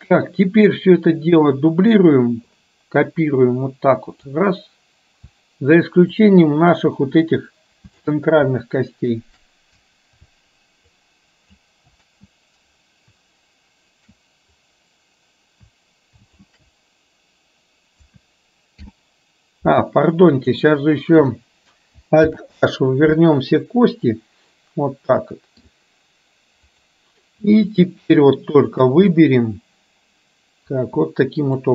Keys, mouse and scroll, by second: 2.6-4.6 drag, 6.2-8.2 shift+drag, 14.6-16.6 drag, 18.9 ctrl+i, 20.4 click, 22.4 alt+h, 24.2-25.8 middle drag, 27.8 shift+click, 28.7 shift+click, 29.2-30.8 middle drag.